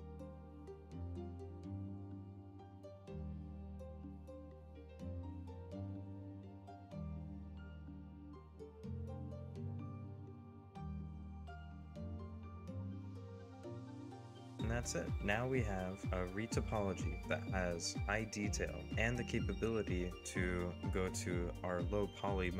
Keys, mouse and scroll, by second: 0.1 middle click, 1.6 scroll down 1, 1.8 middle click, 2.1 shift+middle click, 2.3 middle click, 2.7 middle click, 3.8 scroll down 1, 3.9 middle click, 4.7 middle click, 5.4 middle click, 6.5 middle click, 7.3 middle click, 7.7 middle click, 8.2 middle click, 8.3 middle click, 11.3 scroll down 1, 11.5 double click, 12.0 scroll up 1, 12.2-12.7 scroll down 2, 12.2 middle click, 12.7 scroll up 1, 12.8-13.3 scroll down 2, 13.0 shift+middle click, 13.3 double click, 13.8 shift+scroll up 1, 14.2 double click, 14.3 scroll down 1, 14.5 scroll up 1, 14.8 scroll down 1, 15.2 double click, 15.4 middle click.